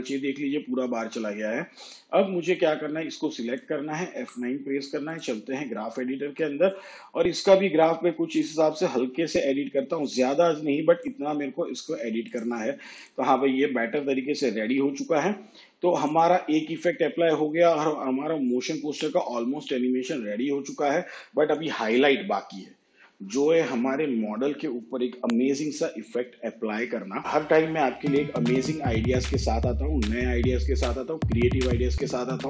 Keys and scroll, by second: 4.2 F9, 14.8 shift+/.